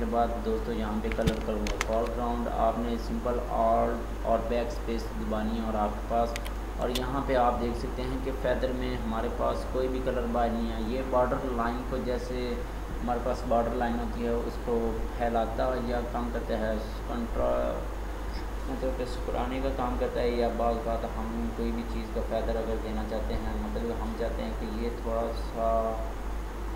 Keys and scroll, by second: 1.7 BackSpace.